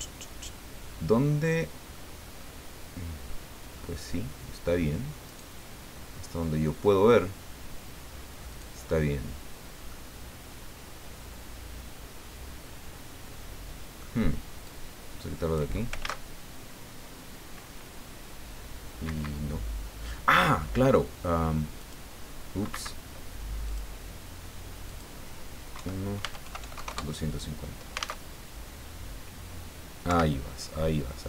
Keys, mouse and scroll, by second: 1.9-2.7 scroll up 4, 3.2-4.1 scroll up 3, 5.3 right click, 8.5 right click, 9.9-14.2 middle drag, 14.6-15.7 drag, 16.0 alt+a, 19.0 Escape, 21.8 click, 22.7 Escape, 23.6 click, 24.9 click, 25.7 KP_1, 26.2 Tab, 26.4 KP_2, 26.6 KP_5, 26.7 KP_0, 26.8 KP_Enter, 28.1 alt+a, 30.0 Escape.